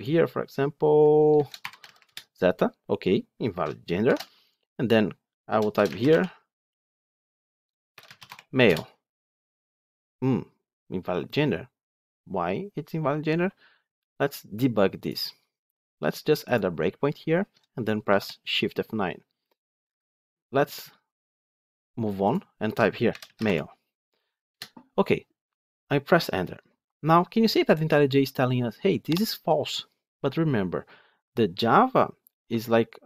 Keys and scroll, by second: 3.9 ctrl+shift+F10, 16.4 ctrl+F8, 17.9 shift+F9.